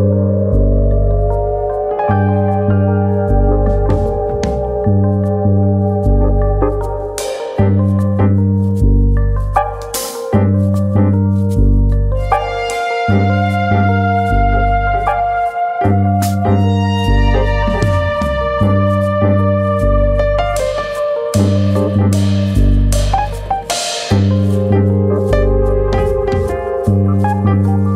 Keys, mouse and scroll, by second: 0.4 alt+click, 1.3 s, 3.0 alt+click, 3.7 s, 5.3 alt+click, 6.1 s, 9.9 1, 11.3 click, 12.3 click, 14.3 click, 15.4 alt+click, 16.2 alt+click, 18.3 alt+click, 19.4 click, 22.0 alt+click, 22.7 click, 24.0 alt+click, 24.7 click, 26.8 alt+click, 27.4 click.